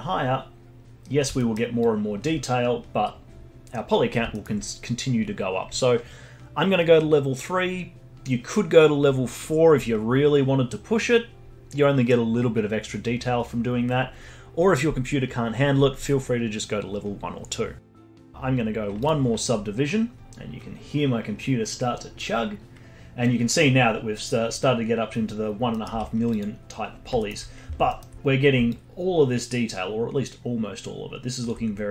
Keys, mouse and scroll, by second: 1.1 scroll up 1, 1.4 alt+middle click, 1.8-4.3 alt+drag, 4.3-7.3 alt+middle drag, 19.0-20.2 drag, 21.2-23.0 scroll down 1, 23.0-23.3 scroll down 1, 23.3 scroll up 1, 25.7 middle click, 25.9 z, 26.8-27.2 scroll down 5, 27.2 alt+middle click, 27.5 scroll up 5, 27.9 alt+middle click, 28.1-28.7 scroll up 4, 28.7-31.6 alt+drag, 31.6-31.9 scroll down 5.